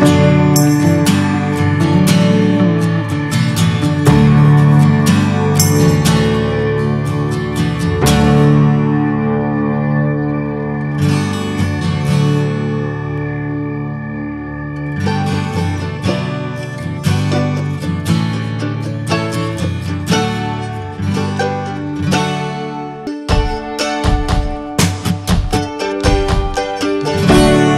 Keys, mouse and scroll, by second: 0.4 scroll down 3, 0.6-1.2 shift+middle drag, 1.2-1.5 scroll up 1, 1.5 click, 1.9 ctrl+a, 2.6 click, 2.8 middle click, 3.0 scroll up 1, 3.2 drag, 3.5 alt+middle drag, 4.2-4.9 shift+middle drag, 4.9 click, 8.3 shift+d, 10.4 Delete, 10.7 drag, 11.1-13.7 middle drag, 13.7-20.3 drag, 20.3-22.0 middle drag, 22.0 click, 22.5 scroll down 1, 22.7-23.1 shift+middle drag, 23.1 scroll up 2, 23.4-25.3 middle drag, 25.3-27.3 drag, 27.4-27.7 shift+middle drag.